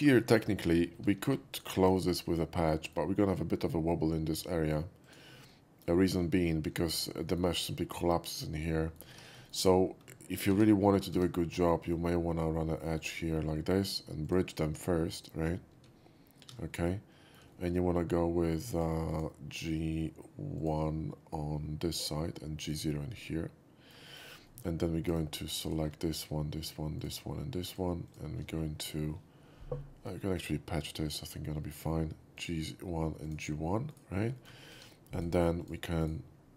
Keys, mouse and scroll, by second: 0.0 shift+middle drag, 0.5 shift+middle drag, 1.0 2, 1.6 alt+click, 2.0 alt+middle click, 2.3 alt+middle click, 5.1 click, 5.5-5.9 middle drag, 6.0 shift+middle drag, 6.4-7.1 shift+middle drag, 7.3 shift+middle click, 8.7 shift+middle drag, 9.5 ctrl+shift+z, 9.5 shift+middle click, 9.7 shift+scroll up 2, 10.5 ctrl+r, 11.2 Tab, 13.1 click, 14.3 click, 15.2 shift+click, 15.9 shift+q, 16.5 shift+q, 16.9 middle click, 17.6 middle drag, 18.8 shift+click, 19.1 shift+click, 20.6 click, 23.2 middle click, 24.1 shift+middle click, 24.5 shift+middle click, 25.1-25.7 shift+right drag, 25.7 shift+click, 26.2 shift+click, 26.7 shift+click, 27.0 shift+click, 27.7 shift+click, 28.1 shift+click, 28.6 shift+scroll up 1, 31.1 click, 31.7 shift+middle click, 32.4 shift+click, 33.3 shift+click, 34.0 shift+right click, 34.4 shift+middle click, 34.8 2, 35.2 click, 35.7 click, 36.1 right click.